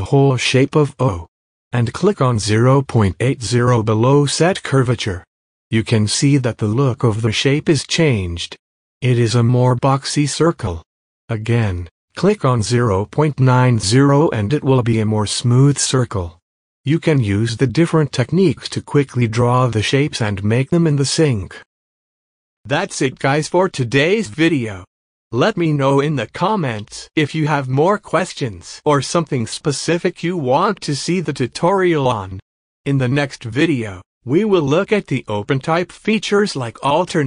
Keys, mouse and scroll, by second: 1.4 space, 1.7-4.3 drag, 5.8 space, 6.8 click, 7.0 space, 7.4 click, 7.8 alt+scroll up 1, 8.7 click, 11.1 typing, 12.0-18.8 drag, 19.3 space, 19.9 space, 21.4 click, 23.2 click, 26.2 scroll down 1, 26.7 click, 26.9 space, 28.2-30.0 drag, 31.5 space, 31.7 click, 31.9 space, 32.8 alt+scroll down 1, 33.0 click, 33.2 space, 33.3 click, 34.1 space, 34.3-35.3 drag, 35.5 space, 35.7 click.